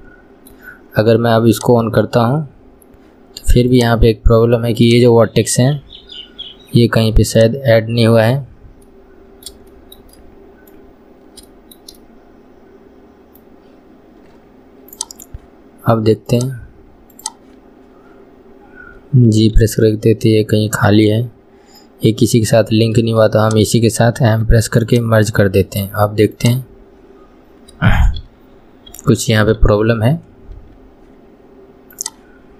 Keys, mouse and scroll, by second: 1.8 click, 3.9 click, 5.0 click, 9.0-11.0 middle drag, 11.0-11.6 scroll up 1, 11.6 shift+middle click, 12.1-15.1 scroll up 1, 15.1 click, 16.5 click, 17.3 click, 23.6 shift+click, 26.6 click, 32.1 click.